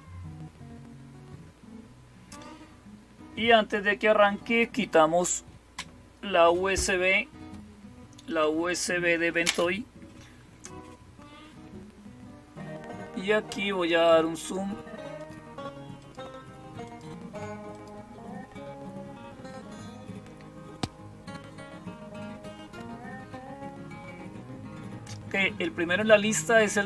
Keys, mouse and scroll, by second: 14.2 click, 15.0 click, 15.8 click, 16.7 click, 17.5 click.